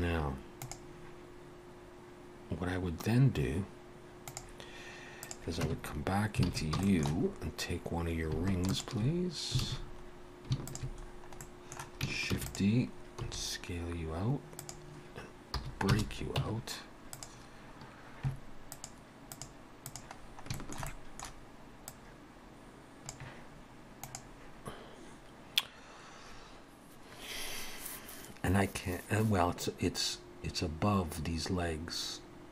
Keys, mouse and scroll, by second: 5.3 click, 5.7 Tab, 6.5 alt+a, 6.8 shift+middle click, 7.3 scroll up 1, 8.3 scroll up 1, 8.6 alt+shift+click, 9.6 alt+a, 9.9-10.2 scroll up 1, 10.6 alt+shift+click, 11.1-11.4 scroll down 2, 11.4 middle click, 12.4 shift+d, 13.2 s, 15.6 p, 16.4 Tab, 17.2 click, 19.4 click, 20.2-20.6 scroll down 3, 20.6 shift+middle click, 20.9 middle click, 21.9 click.